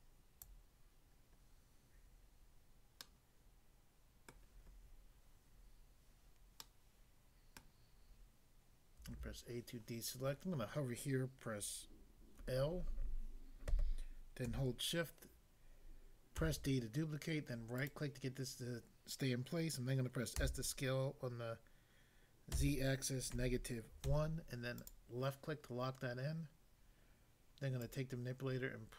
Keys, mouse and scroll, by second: 0.5 click, 3.0 middle click, 4.3 middle click, 6.7 middle click, 7.6 middle click, 9.1 a, 12.4 l, 16.4 d, 17.8 right click, 20.4 s, 22.5 z, 23.3 -, 24.1 1, 24.8 click, 27.8 click.